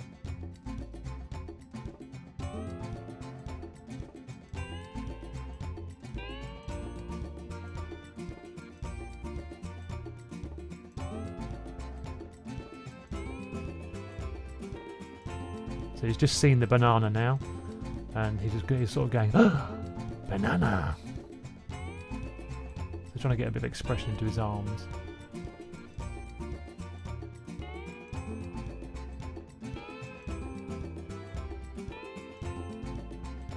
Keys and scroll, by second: 0.0 super+c, 4.7 2, 4.7 2, 9.5 m, 11.8 F6, 11.8-12.2 F6, 21.1 2, 21.2 2, 24.2-24.6 super+z, 29.6-30.6 typing, 31.6 o, 31.8 o, 31.9 o, 33.2 super+c, 33.4 super+v, 33.4 super+v.